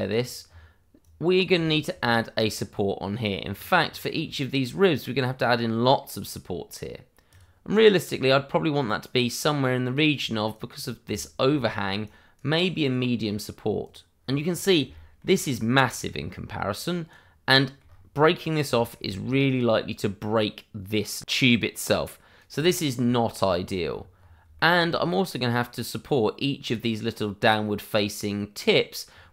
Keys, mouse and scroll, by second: 0.1-1.0 scroll up 1, 1.0 right click, 1.6 shift+middle click, 1.9 scroll up 1, 7.2 click, 10.1-10.4 scroll down 1, 10.5 right click, 11.1 middle click, 12.0 right click, 14.1-14.5 scroll down 1, 14.9 shift+middle click, 15.4-15.8 scroll down 1, 16.2 right click, 17.5 shift+middle click, 17.8 scroll up 1, 18.7 shift+middle click, 19.0 shift+scroll up 1, 21.8 right click, 22.6 shift+middle click, 23.0-23.3 shift+scroll up 1, 23.5 scroll down 1, 24.1 scroll up 1, 24.5 shift+middle click, 24.8 scroll up 1, 25.4 right click.